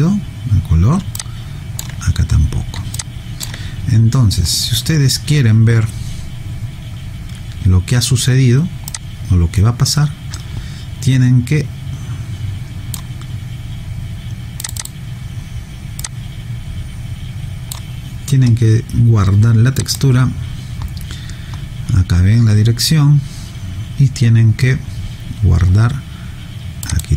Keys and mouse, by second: 1.1 alt+click, 2.9 alt+click, 8.9 click, 14.6 click.